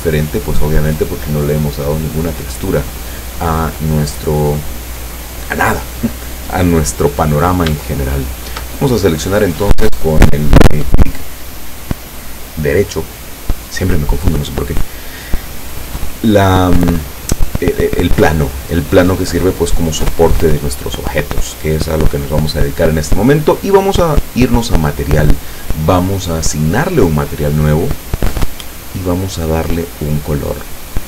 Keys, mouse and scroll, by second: 0.1 middle click, 7.9 shift+middle click, 8.9 shift+right click, 14.5 scroll down 1, 24.3 click, 27.4 click.